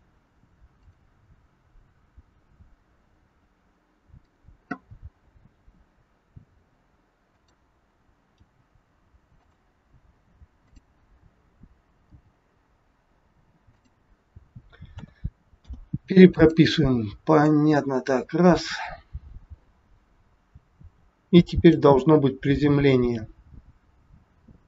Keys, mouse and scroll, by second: 0.8 click, 4.1 click, 5.5 r, 8.4 g, 10.5 click, 12.0 g, 15.0 a, 15.5 i, 17.4 click.